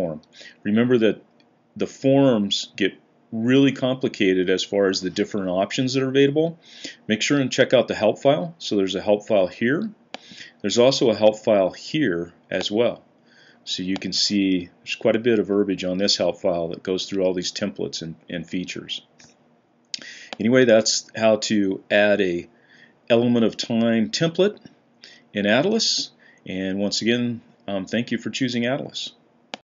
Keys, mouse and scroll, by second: 14.4 Down, 14.9 Down, 15.0 Down, 15.1 Down, 15.2 Down, 15.3 Down, 15.3 Down, 15.4 Down, 15.5 Down, 15.5 Down, 15.7-16.3 Down, 16.8-18.9 Up, 20.8 Up.